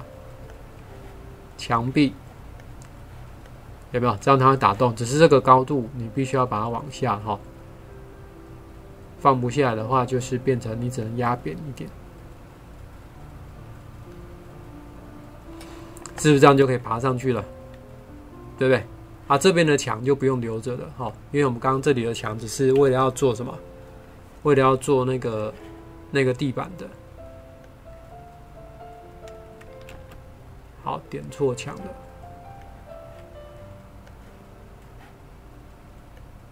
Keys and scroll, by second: 22.8 Delete, 29.9 ctrl+z.